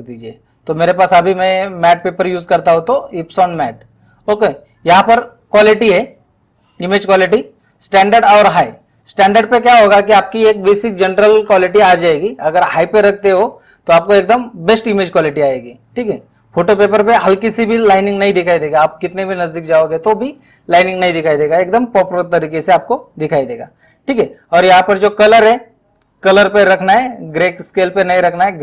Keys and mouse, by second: 3.3 click, 6.9 click, 14.0 click, 23.4 click.